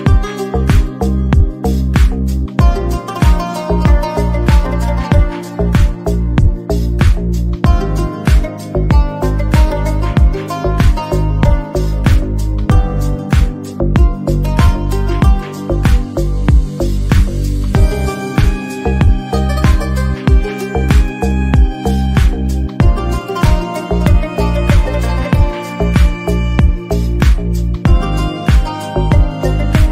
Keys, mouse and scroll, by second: 1.4 a, 1.7 g, 3.0 shift+middle click, 3.4-4.0 scroll down 3, 3.5 alt+z, 3.6 middle click, 4.1 Tab, 4.3 shift+drag, 4.6-4.9 shift+middle drag, 4.9 r, 5.7 KP_1, 5.9-6.4 shift+middle drag, 6.4 click, 6.5-6.9 shift+middle drag, 7.2 shift+a, 7.4 Tab, 7.7 alt+z, 8.0 s, 8.4 g, 8.9 click, 9.6 g, 10.9 click, 11.2 h, 11.4 ctrl+z, 11.6 g, 11.9 shift+middle click, 12.4 scroll up 2, 12.6 middle click, 12.7 Tab, 12.9 z, 13.1 click, 13.6 Tab, 13.7 a, 14.0 alt+s, 14.6 s, 15.5 Tab, 15.7-18.8 typing, 15.9 alt+z, 16.0 click, 16.7 Tab, 19.1 scroll down 1, 19.1 Tab, 19.6 shift+drag, 19.9 shift+middle click, 20.1 scroll down 2, 20.2 shift+middle click, 20.6 r, 21.3 KP_1, 21.5 shift+middle click, 21.7-22.0 shift+middle drag, 22.0 click, 22.2 KP_7, 22.4 Tab, 22.5 a, 22.7 shift+middle click, 23.1 alt+e, 23.7 click, 24.4 middle click, 24.8 a, 24.9 shift+n, 25.1 Tab, 25.3 shift+middle drag, 25.4 click, 25.6 Tab, 25.8 a, 26.0 KP_7, 26.3 alt+z, 26.7 alt+e, 26.9 click, 27.1 alt+z, 27.2 middle click, 27.5 Tab, 27.8 Tab, 27.9-29.9 typing, 28.3 Tab, 28.4 scroll up 2, 28.5 shift+middle click.